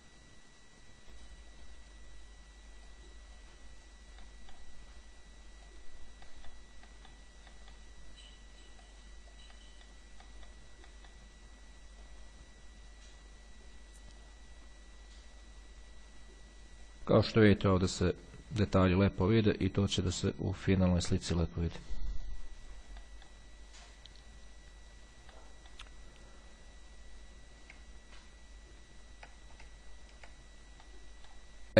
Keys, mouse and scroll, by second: 1.9 click, 3.0-4.5 drag, 5.8 click, 7.1 middle click, 7.7 click, 9.1 click, 9.7 middle click, 10.5 click, 11.1 middle click, 12.2-17.5 drag, 19.5 click, 20.3-22.5 drag, 23.2 middle click, 24.1-25.5 drag, 25.7 click, 28.3-28.8 ctrl+scroll down 2, 30.0-30.5 scroll down 2, 31.0 click.